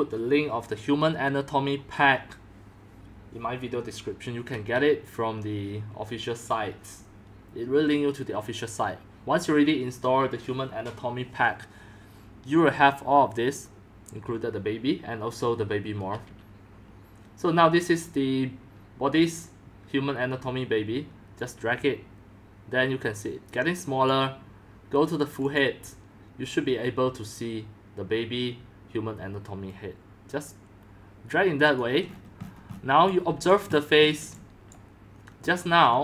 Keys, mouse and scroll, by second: 21.3-22.1 drag, 24.0 click, 25.5 click, 27.1-32.1 drag, 32.1 middle click, 32.2-33.0 scroll down 18, 32.7-33.8 typing, 33.5 drag, 33.7-34.0 scroll, 34.1-34.8 scroll down 1, 34.8-36.0 drag.